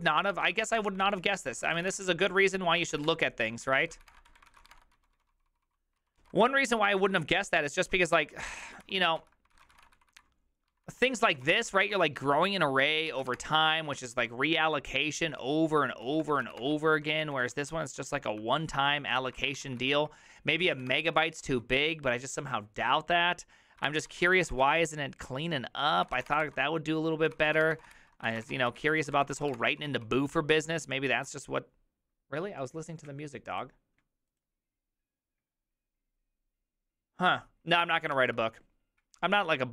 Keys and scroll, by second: 0.1 ctrl+a, 0.3-1.8 typing, 1.2 ctrl+u, 1.7 ctrl+u, 1.8 ctrl+c, 1.9 Return, 2.1 ctrl+d, 2.2 ctrl+d, 2.8 ctrl+c, 3.0-14.3 typing, 3.1 Return, 3.9 ctrl+c, 3.9 ctrl+d, 4.1 Return, 4.3 ctrl+d, 6.2 ctrl+u, 15.4 ctrl+u, 15.8 ctrl+u, 16.1 ctrl+u, 16.3-17.0 typing, 17.2 ctrl+d, 17.7 ctrl+d, 18.3-21.3 typing, 21.5 ctrl+u, 21.8 ctrl+u, 24.1-30.5 typing, 27.3 ctrl+c, 31.2 ctrl+u.